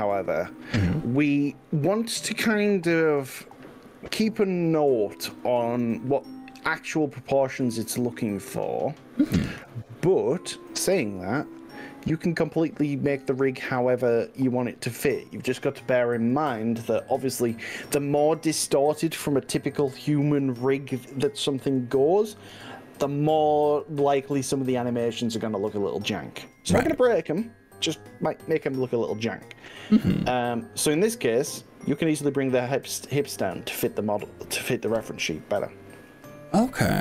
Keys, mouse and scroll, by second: 35.6-37.0 middle drag.